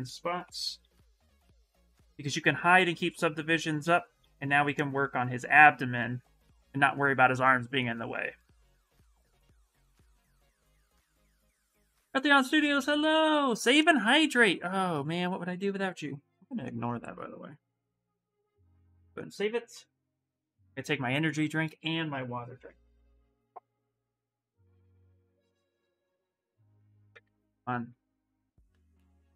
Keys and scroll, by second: 0.2-1.1 typing, 2.2 s, 4.0 s, 9.0 Return, 9.5 Return.